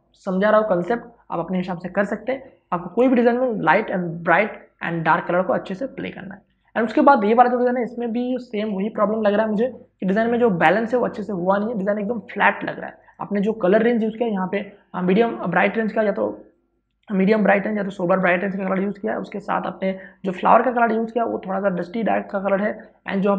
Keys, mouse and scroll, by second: 8.1 space, 8.4 ctrl+click, 13.2 click, 16.7-20.4 drag.